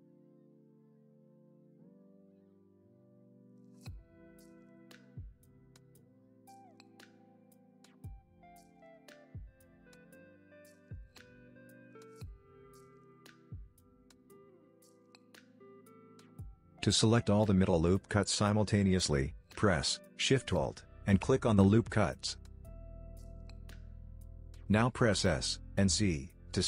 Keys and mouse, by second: 2.2 ctrl+r, 5.6 ctrl+r, 7.9 middle click, 9.3 ctrl+r, 12.9 ctrl+r, 16.1 middle click, 18.1 alt+click, 21.9 middle click, 23.8 s.